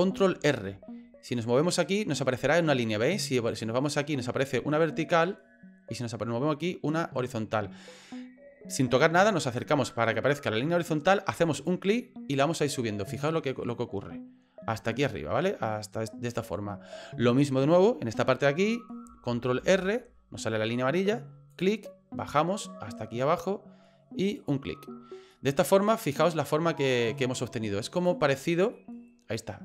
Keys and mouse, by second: 0.3 ctrl+r, 19.6 ctrl+r, 25.4 middle click, 26.4 middle click, 28.1 click, 28.7-29.6 middle drag.